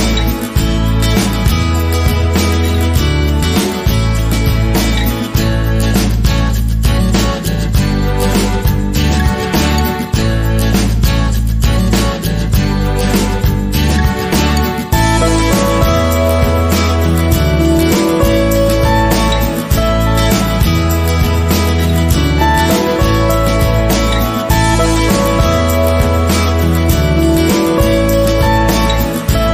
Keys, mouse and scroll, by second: 0.2 space, 1.0-9.5 middle drag, 3.0 k, 5.8 space, 8.1 a, 9.5 click, 10.0-13.0 middle drag, 13.0 KP_1, 13.4 click, 13.7 scroll up 1, 13.9 shift+middle click, 14.2 click, 14.3 g, 14.6 click, 14.7 middle click, 14.8 click, 15.0 click, 15.2 g, 15.9 click, 17.2 ctrl+r, 18.0 click, 18.6 ctrl+r, 19.4 click, 19.9 ctrl+z, 21.0-22.8 drag, 21.8 ctrl+r, 23.0 ctrl+r, 24.1 ctrl+r, 25.0 click, 25.4 ctrl+r, 26.8 click, 27.4 ctrl+r, 28.2 click, 28.4 ctrl+r, 29.4 click.